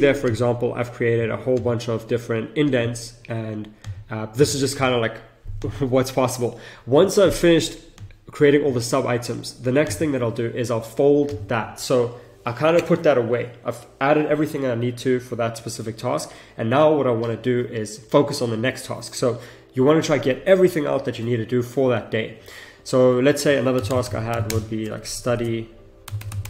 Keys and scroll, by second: 23.7 shift+s, 24.5 space, 24.9 BackSpace.